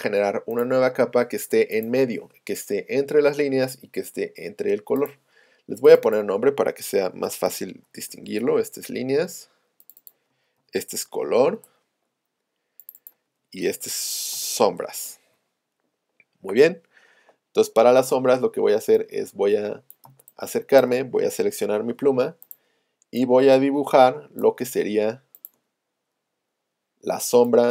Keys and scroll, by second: 18.5 z, 20.1 space, 21.5 p, 23.9 space.